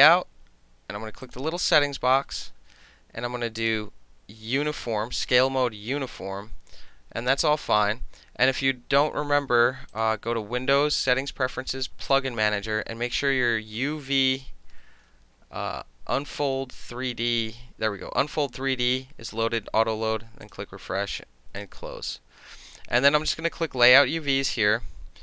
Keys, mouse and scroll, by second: 1.3 click, 2.5 middle click, 2.7 middle click, 3.6 click, 4.7 click, 6.0 middle click, 6.3 middle click, 11.9 middle click, 12.1 click, 12.1-13.7 middle drag, 13.8 middle click, 14.5 middle click, 14.9 middle click, 15.2 middle click, 15.5 middle click, 16.2 middle click, 16.7 middle click, 20.5 click, 21.6 click.